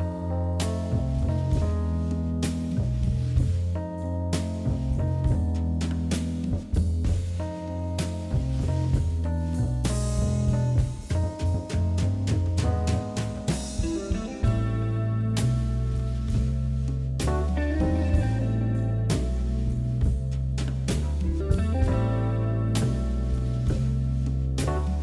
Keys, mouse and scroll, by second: 0.2 g, 1.3 click, 1.7 g, 4.0 click, 4.7 e, 6.3 click, 6.5 e, 7.2 ctrl+z, 7.4 ctrl+z, 7.9 click, 8.4 g, 10.1 click, 10.6 click, 11.4 r, 13.4 click, 14.3 g, 15.7 shift+click, 16.4 e, 19.1 e, 20.7 r, 21.5 g, 22.5 click, 23.1 g.